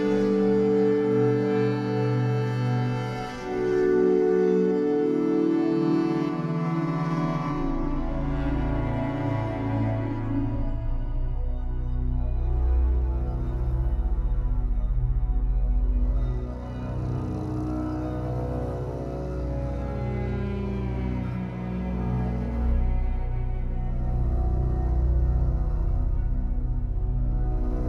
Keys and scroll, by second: 4.4 Escape, 17.3 w, 24.5 ctrl+z, 25.1 Escape.